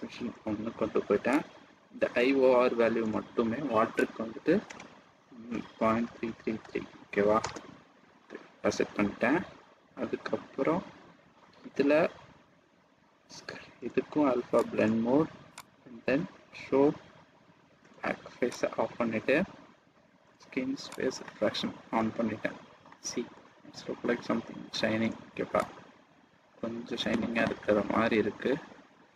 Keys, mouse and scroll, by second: 0.1-1.3 scroll down 2, 1.3 click, 4.0 click, 7.1 KP_3, 10.1-11.0 scroll down 3, 11.2-12.7 scroll down 2, 14.5 click, 18.5 click, 20.9 click, 21.9 middle click, 23.1 scroll up 1, 23.5 middle click, 25.6 click, 27.7 click.